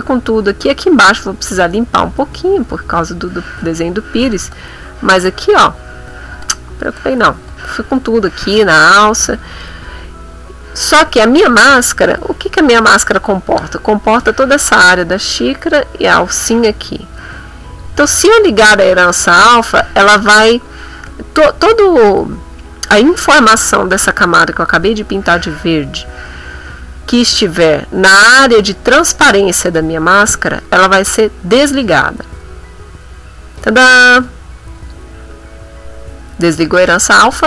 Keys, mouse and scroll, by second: 0.0 click, 3.3-9.0 drag, 12.6 click, 17.5 click, 32.1 click, 34.8 click, 37.0 click.